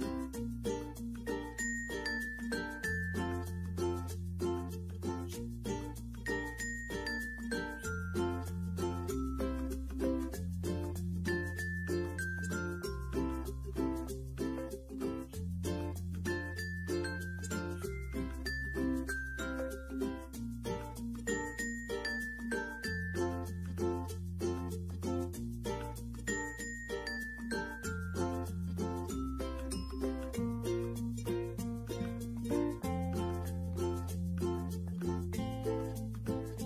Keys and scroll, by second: 13.0 ctrl+z, 14.3 ctrl+z, 15.7 ctrl+z.